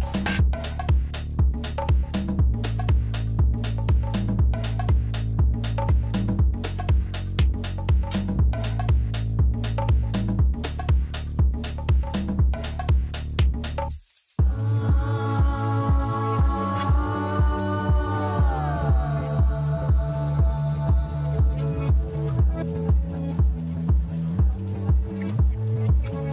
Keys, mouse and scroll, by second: 0.7 shift+click, 2.2-2.6 scroll down 4, 2.6 middle click, 3.5-4.5 scroll up 1, 4.5 g, 9.0 Tab, 9.7 scroll down 2, 10.1-13.2 middle drag, 14.2-15.1 scroll up 4, 15.1 Tab, 15.8-18.7 middle drag, 18.7 g, 20.4 Tab, 20.7-21.1 scroll down 2, 21.1-23.7 middle drag, 23.7 ctrl+r, 24.7 click, 25.4 scroll down 3, 26.0-26.3 middle drag.